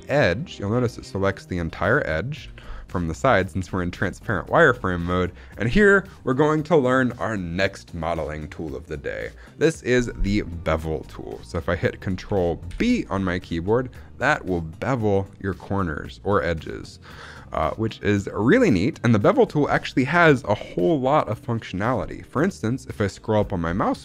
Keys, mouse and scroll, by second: 1.7 middle click, 2.2 KP_3, 2.8 shift+middle click, 3.0-3.7 scroll up 2, 3.8 shift+middle click, 12.6 ctrl+b, 23.0-24.0 scroll up 5.